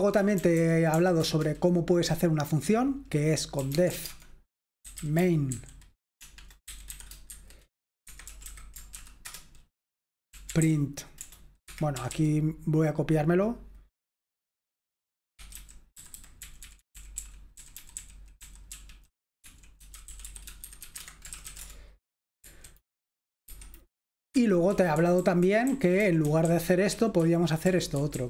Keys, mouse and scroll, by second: 0.0-1.5 typing, 3.4-9.0 typing, 8.1 Escape, 9.3 Return, 10.1-12.5 typing, 11.7 Escape, 15.5-21.8 typing, 21.0 shift+Escape, 22.4 F4, 23.5 F5, 24.3 Escape, 24.4-28.1 typing.